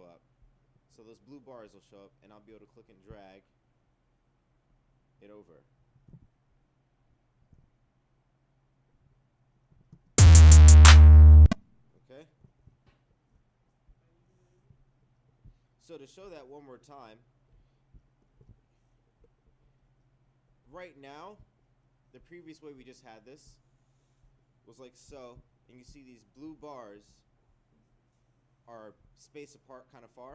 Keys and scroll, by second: 9.7 Return, 12.7 ctrl+1.